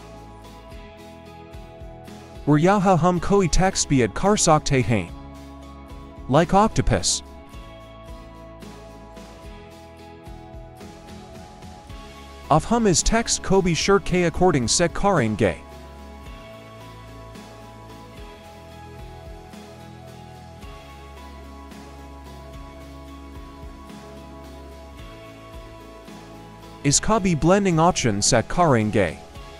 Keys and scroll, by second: 0.2 Up, 5.1 Return, 5.1 Delete, 6.7 o, 8.2-10.9 typing, 11.2 Return, 12.6 v, 16.4 Left, 23.5 Return.